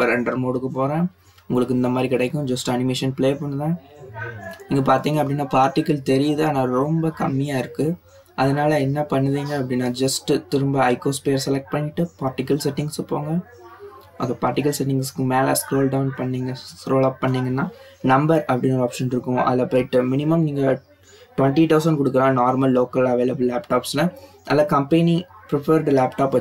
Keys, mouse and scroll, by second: 2.5 click, 3.2-4.5 scroll up 5, 5.3 click, 6.0-6.8 scroll down 2, 10.4 click, 12.6 click, 15.0-16.6 scroll up 10, 16.6-17.9 drag, 17.9 BackSpace, 19.1 0, 22.8 click, 24.9-25.4 drag, 25.9 click.